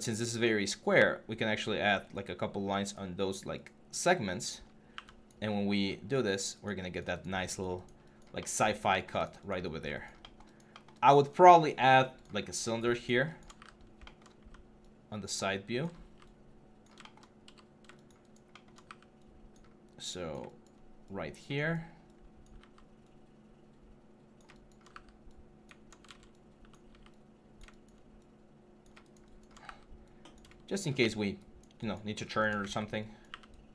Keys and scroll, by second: 4.4 3, 4.7 q, 9.4 1, 13.3-15.5 typing, 17.2 f, 18.6 w, 24.2 alt+e, 24.7 w, 25.8 ctrl+z, 26.6 r, 29.4 w, 32.3 w, 33.1 q.